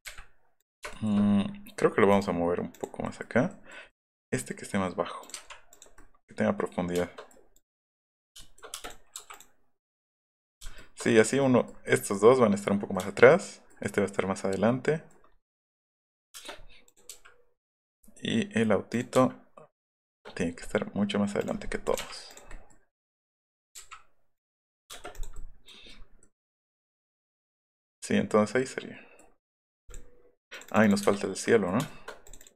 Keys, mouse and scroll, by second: 0.9 shift+middle click, 3.0 middle click, 3.5 middle click, 5.2 click, 5.4 Up, 5.7 click, 8.3 shift+middle click, 8.7 space, 8.8 click, 9.3 click, 10.3 click, 10.7 shift+middle click, 14.1 middle click, 15.3 middle click, 15.6 middle click, 16.2 scroll down 2, 16.3 space, 16.8 click, 17.1 m, 20.2 middle click, 21.4 click, 21.8 click, 22.3 click, 22.5 middle click, 23.5 click, 23.7 Up, 24.3 click, 24.5 middle click, 24.9 space, 25.1 click, 25.3 middle click, 25.6-26.0 scroll down 2, 26.3-27.3 middle drag, 28.2 middle click, 29.0 middle click, 29.3 middle click, 29.6 middle click, 29.9 middle click, 31.0 Delete, 31.4 middle click, 31.8 shift+middle click, 32.2 shift+middle click, 32.3 middle click.